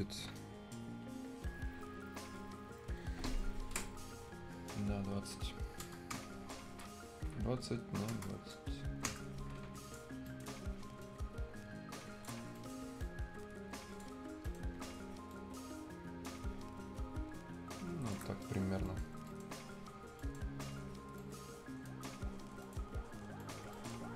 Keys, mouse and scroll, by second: 4.5-4.8 scroll up 1, 4.9-6.1 scroll down 1, 6.1 Return, 7.0-8.1 scroll up 1, 9.0 Return, 9.8 click, 10.0 scroll up 1, 10.2 right click, 11.0 shift+click, 12.3 scroll up 1, 12.5 right click, 12.9 click, 14.1 scroll up 1, 14.4 right click, 15.3 shift+click, 18.2 shift+scroll down 1, 18.4 right click, 18.6 scroll up 1, 18.8 right click, 19.0 scroll down 1, 19.2 right click, 19.9 scroll up 1, 20.1 right click, 21.1-22.6 right drag, 22.6 click, 23.2 scroll up 1, 23.3 right click, 23.5 scroll down 1, 23.7 right click.